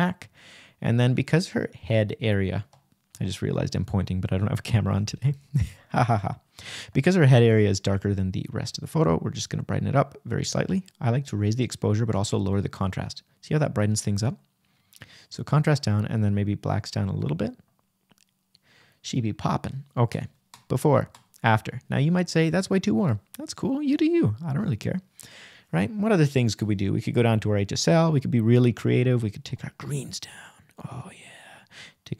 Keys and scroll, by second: 12.6 Return, 13.0 \.